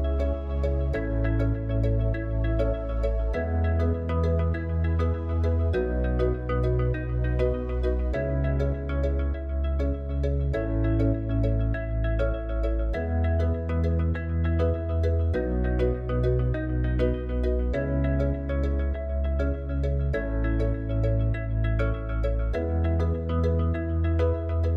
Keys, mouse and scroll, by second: 0.6 click, 2.2 click, 5.1 click, 8.1 click, 9.4 Tab, 17.0 Tab.